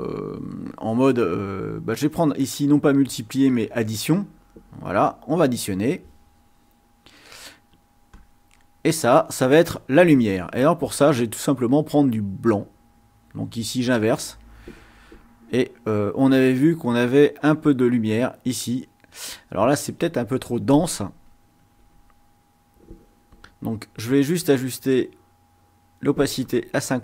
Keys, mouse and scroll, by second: 3.2-5.6 drag, 8.0 click, 13.8 click, 17.1 click, 17.5 click, 21.6 ctrl+z, 24.4-26.1 drag.